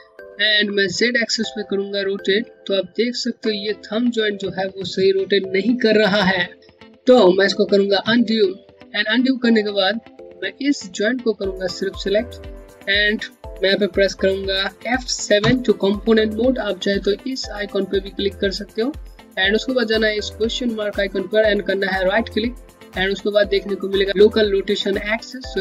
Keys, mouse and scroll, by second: 1.3 click, 2.3 alt+click, 2.4 Home, 7.7 z, 10.6 z, 10.6 click, 15.1 F7, 21.6 right click.